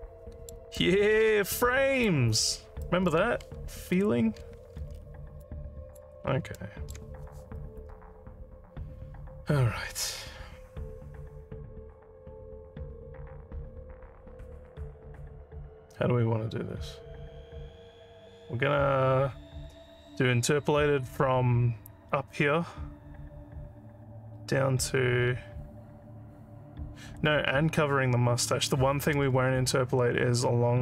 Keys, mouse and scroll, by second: 0.8-2.1 alt+drag, 2.4 alt+scroll up 1, 2.8 alt+middle click, 4.9 alt+middle click, 5.4 alt+middle click, 6.2 alt+scroll up 2, 6.6 alt+middle click.